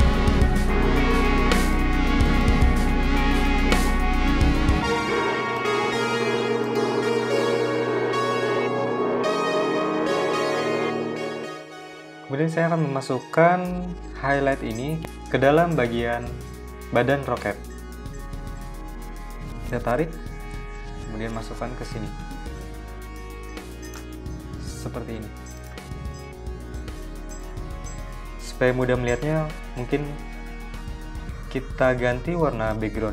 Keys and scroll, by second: 2.5 v, 3.9 super+z, 31.1 m.